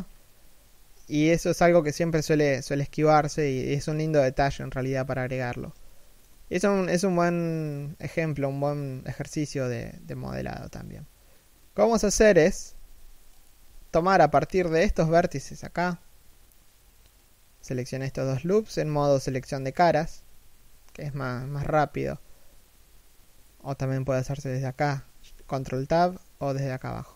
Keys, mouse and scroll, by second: 0.5 scroll up 1, 0.6 z, 5.5 shift+middle click, 13.0 Tab, 13.5 alt+right click, 14.0 alt+shift+right click, 20.5 Tab, 26.6 Tab.